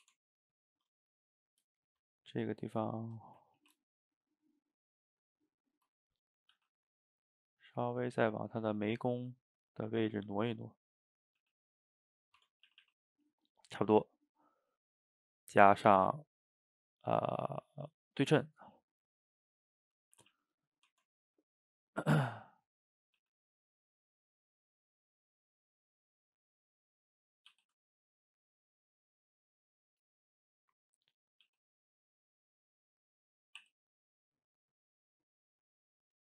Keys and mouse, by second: 0.1 Tab, 0.8 Tab, 1.5 click, 1.7 shift+click, 2.1-3.6 middle drag, 3.6 ctrl+t, 6.6 g, 7.6 click, 7.7 middle click, 8.2 g, 9.0-11.2 middle drag, 11.2 click, 11.4 g, 12.2 middle drag, 12.4 Tab, 12.7 a, 12.9 a, 13.2 middle drag, 13.5 click, 14.8 click, 15.5-18.5 drag, 20.0 middle click, 20.2 a, 20.4 a, 20.6 click, 20.9 Tab, 21.8 click, 22.0-22.7 middle drag, 22.7 click, 23.2 g, 25.3 drag, 25.5-27.6 middle drag, 27.6 g, 30.7 drag, 31.2 shift+drag, 31.5 g, 33.2 click, 33.6 e.